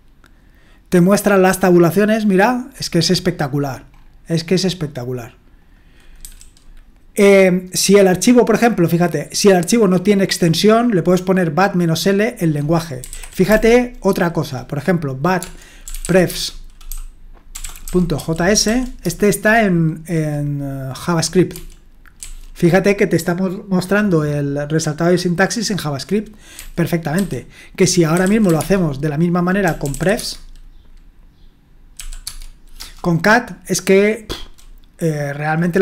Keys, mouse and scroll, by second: 5.6 click, 6.2 q, 9.4-10.8 drag, 12.5 click, 12.8-14.0 typing, 15.4-19.1 typing, 21.5-22.2 typing, 26.5-30.4 typing, 31.9 typing, 32.2 Tab, 32.8 Return.